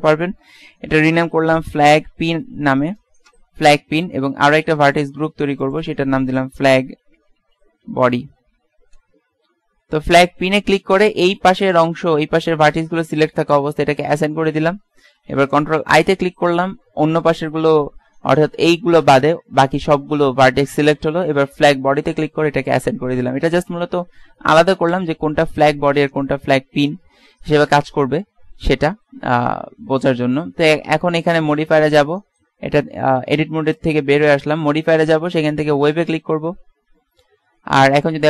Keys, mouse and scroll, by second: 14.1-15.9 drag, 16.1 ctrl+i, 25.0 a, 31.7-33.5 drag, 32.3 Tab, 37.4 middle click.